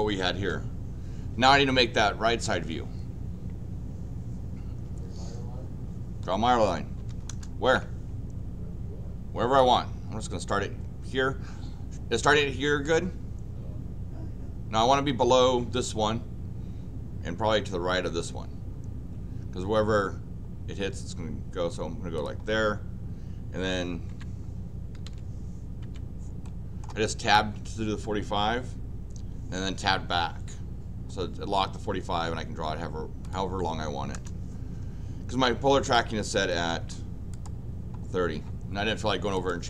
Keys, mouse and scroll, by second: 7.0 l, 7.3 Return, 22.2 click, 24.1 Tab, 25.8 Tab, 26.4 middle click, 33.2 click, 34.1 Return, 37.3 click, 39.3 click.